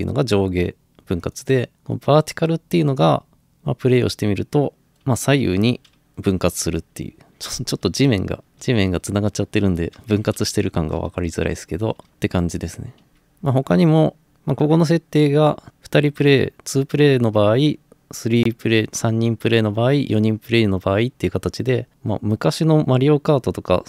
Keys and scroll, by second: 4.9-8.0 typing, 9.2-12.1 typing.